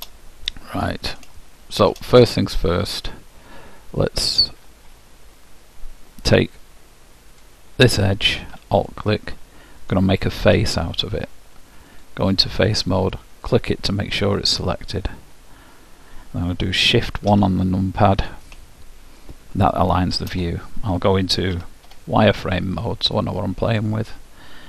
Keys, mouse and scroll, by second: 7.6-10.6 drag, 10.6 f, 12.1-14.8 drag, 19.4-22.6 middle drag, 21.7 z.